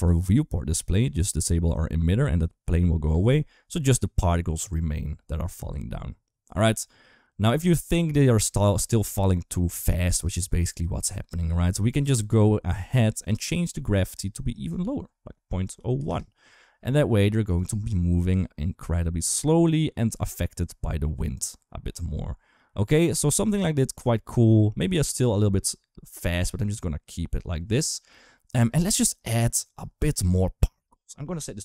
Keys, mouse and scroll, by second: 0.8 click, 2.9 space, 4.4 click, 9.8 space, 10.5 click, 14.2-15.9 drag, 17.2 click, 17.5 space, 28.5 space, 30.7-31.6 drag.